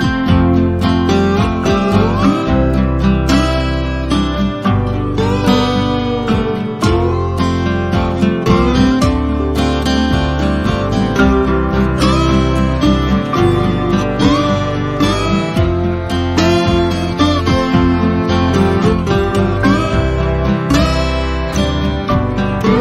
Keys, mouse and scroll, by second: 0.0 click, 6.8 ctrl+scroll down 1, 8.4 F1, 9.0-9.7 click, 9.5 F1, 11.1 click, 17.0 Return, 17.4 ctrl+shift+=, 18.0 F1, 18.5 click, 19.0 ctrl+c, 19.2 click, 19.6 ctrl+shift+v, 20.0 z, 20.1-20.7 click, 20.7 F1, 21.8-22.4 click.